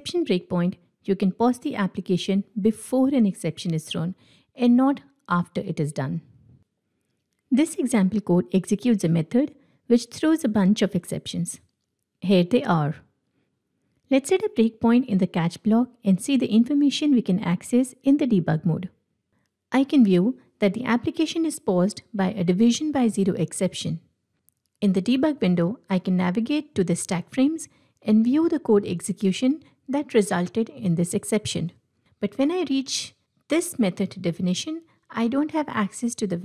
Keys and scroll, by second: 10.4 ctrl+b, 13.6 ctrl+Tab, 14.3 ctrl+F8.